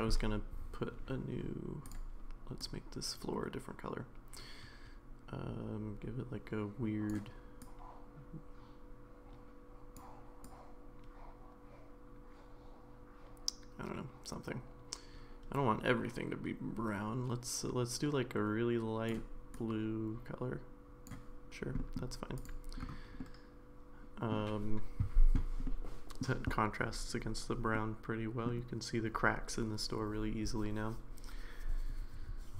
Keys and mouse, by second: 1.9 click, 21.8 middle drag, 23.3-24.3 middle drag, 25.6-26.2 middle drag, 27.7-28.5 middle drag.